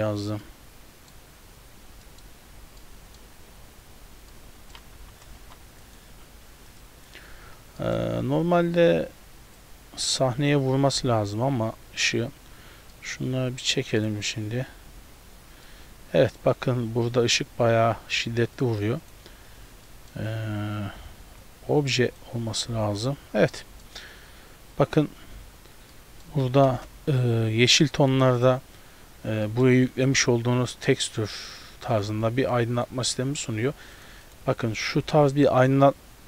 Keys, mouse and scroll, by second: 0.5 middle click, 1.8-2.8 scroll down 5, 2.1 middle click, 2.8 middle click, 3.4-4.6 scroll down 4, 4.4 middle click, 5.0 g, 6.2 s, 7.8 middle click, 8.2-9.2 scroll down 1, 9.2-9.6 scroll down 2, 9.6 click, 11.4-12.4 scroll up 1, 13.0 middle click, 13.4-14.0 scroll up 1, 14.0 click, 15.7 middle click, 18.6 click, 19.9 middle click, 20.2 scroll up 2, 21.5 click, 23.6 middle click, 24.1-24.5 scroll up 2, 25.3 scroll up 2, 26.0 middle click, 26.8 KP_0, 29.1-29.7 scroll down 4, 29.5 middle click, 29.7 scroll up 2, 32.2 scroll up 1, 32.2 z.